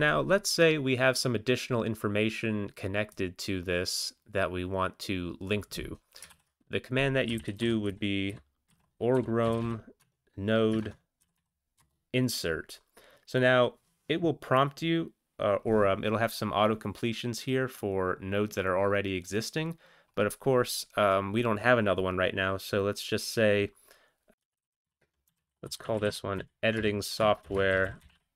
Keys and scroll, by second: 6.3 alt+x, 7.3-9.6 typing, 10.0 Tab, 10.8 ctrl+BackSpace, 11.2 typing, 11.8 Return, 24.4-28.1 typing.